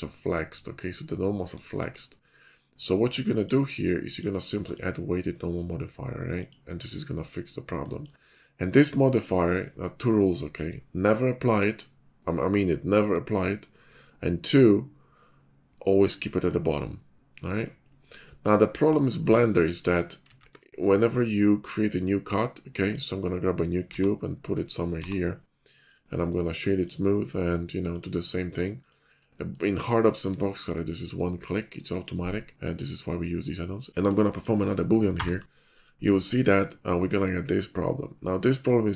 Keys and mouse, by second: 20.3 shift+a, 23.8 f, 24.9 g, 25.9-27.9 drag, 28.7 click, 29.3 shift+middle click, 30.5 shift+middle drag, 30.8 middle drag, 31.6 middle click, 32.0 shift+middle click, 33.2-33.7 shift+middle drag, 33.8 shift+middle click, 33.9 ctrl+KP_Subtract, 33.9 ctrl+z, 34.4 shift+middle click, 34.7 click, 35.1 ctrl+KP_Subtract, 38.1-38.9 middle drag.